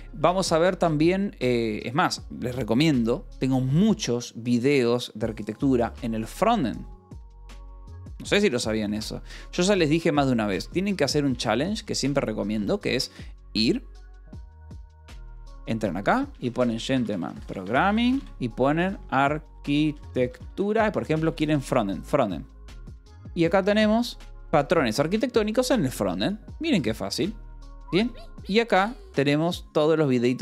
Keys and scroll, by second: 0.0 space, 6.0-9.3 typing, 10.4 f, 11.2 Escape, 11.7-13.0 typing, 16.0-21.9 typing.